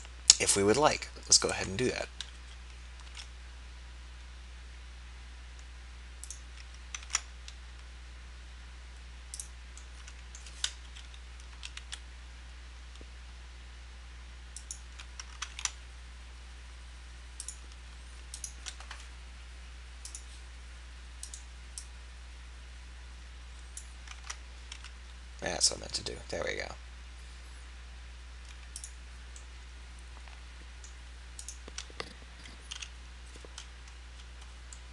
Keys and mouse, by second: 2.4 KP_3, 3.2 e, 6.3 click, 7.1 ctrl+a, 10.8 KP_3, 11.6 e, 15.6 ctrl+a, 17.5-23.8 drag, 23.8 middle click, 24.2 ctrl+z, 24.7 e, 31.4-32.8 drag, 32.8 f.